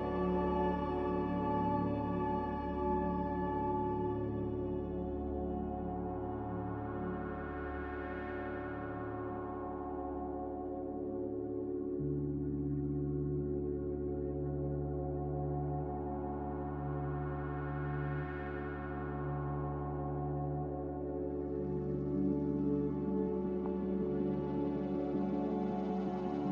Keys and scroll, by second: 1.0-1.9 typing, 2.3 Return, 5.9-6.2 typing, 11.3 5, 11.7 Return, 15.7 Return.